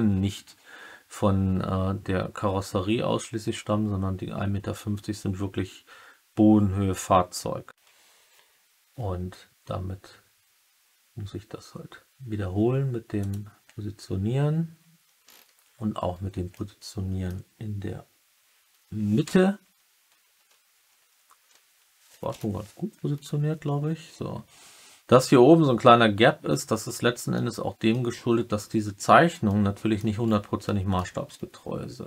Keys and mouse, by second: 7.6 g, 13.1 click, 16.6-17.2 middle drag, 19.2 g, 20.3 Left, 20.7 Right, 20.9 Right, 22.2 Return, 27.3-27.9 middle drag, 29.4-29.9 middle drag, 30.6-30.9 middle drag.